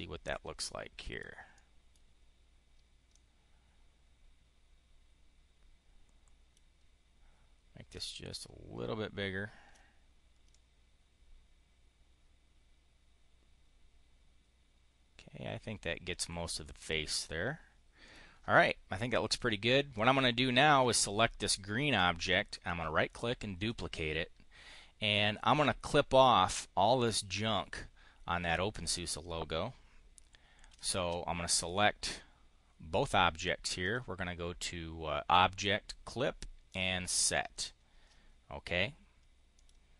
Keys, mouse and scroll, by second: 1.4 click, 2.9-6.5 drag, 7.8-9.7 ctrl+drag, 10.4-16.4 drag, 16.6 click, 17.9 click, 19.7 click, 22.0 click, 23.4 click, 30.7 shift+click, 33.7 click, 36.5 click, 37.3 click, 39.4 click.